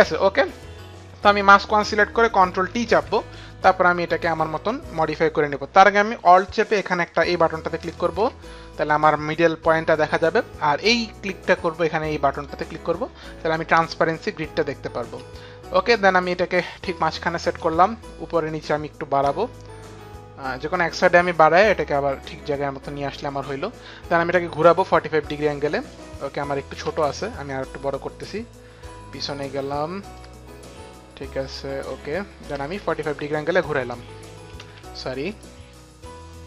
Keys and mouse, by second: 1.3 click, 2.8 ctrl+t, 7.8 alt+click, 12.4 click, 14.6 click, 18.7 alt+click, 20.7 click, 24.6 click, 27.0 ctrl+z, 27.0 click, 28.3 click, 30.3 ctrl+z, 30.3 click, 32.5 click, 34.7 z, 35.4 click.